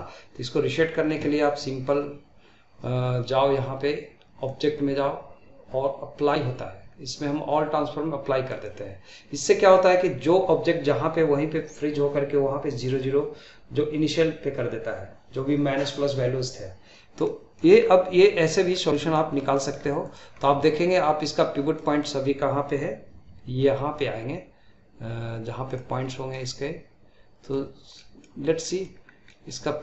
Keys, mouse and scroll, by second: 4.5-17.3 drag, 17.3-17.8 middle drag, 17.8-18.2 scroll down 2, 18.2-18.7 middle drag, 18.7 scroll down 2, 19.0 middle click, 19.4 scroll up 1, 19.5-20.0 middle drag, 20.0-20.4 drag, 20.4-26.0 middle drag, 26.0 scroll up 1, 26.3-28.4 middle drag, 28.4 scroll up 1, 28.7-29.0 middle drag, 29.0 scroll down 1, 29.3 middle click.